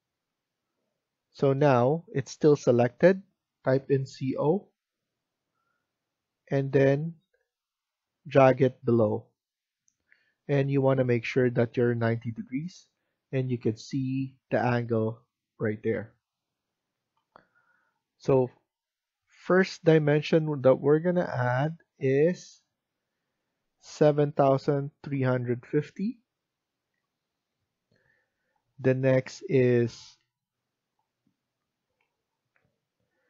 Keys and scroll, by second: 3.8-4.3 typing, 23.9-26.8 typing, 30.7 typing.